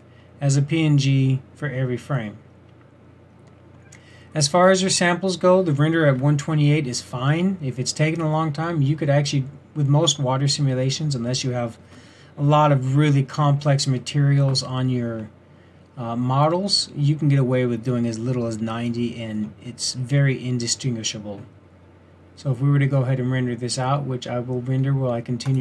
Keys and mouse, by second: 20.3-25.6 drag.